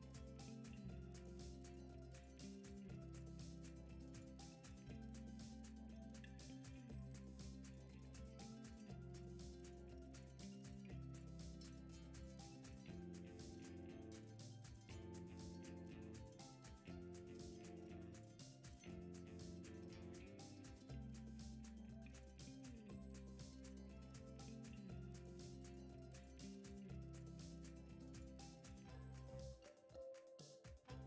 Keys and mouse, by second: 1.6 r, 3.5 shift+d, 4.7 x, 5.5 drag, 5.9 shift+d, 6.8 r, 7.4 g, 8.1-9.3 middle drag, 8.4 g, 9.7 KP_3, 10.3 r, 10.9 g, 12.6 KP_1, 14.6-15.2 middle drag, 15.7 r, 16.5 s, 17.3 g, 18.1 g, 19.8 g, 21.1 g, 22.7 g, 23.6 g, 25.2 click, 26.4 shift+middle drag, 27.0 click, 27.8-28.3 middle drag, 28.7 Tab, 29.2-30.0 middle drag, 30.2 middle click.